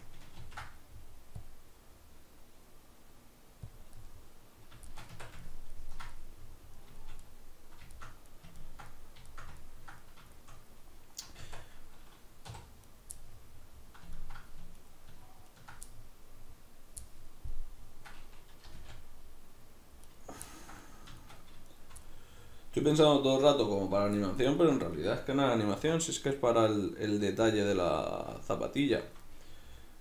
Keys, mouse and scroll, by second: 0.4 ctrl+r, 3.8 click, 4.0-12.9 middle drag, 5.1 Tab, 11.5 Tab, 12.5 3, 12.9 right click, 13.2-14.8 middle drag, 14.8 ctrl+right click, 15.5 ctrl+right click, 15.9-20.2 middle drag, 18.7 g, 20.2 right click, 20.5-21.7 ctrl+middle drag, 21.7 shift+right click, 22.1-23.1 middle drag, 23.1 ctrl+right click, 23.8 ctrl+right click, 24.2-27.6 middle drag, 25.9 e, 27.6 click, 28.1-30.0 shift+middle drag.